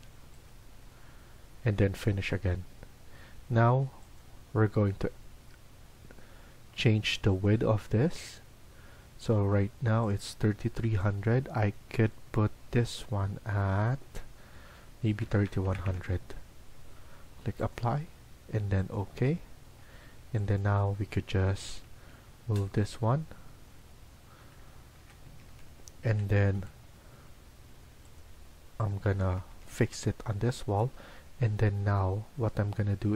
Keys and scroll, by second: 3.0 Escape, 14.9-16.1 typing, 19.7 Escape, 20.0 Escape, 21.4 Left, 21.7 Left, 21.8 Left, 23.5 Right, 24.5 Left, 24.9 Left, 25.2 Escape, 25.4 Escape, 26.0-26.5 typing, 29.2 Escape, 29.4 Escape, 29.7 Escape, 30.4-31.4 typing.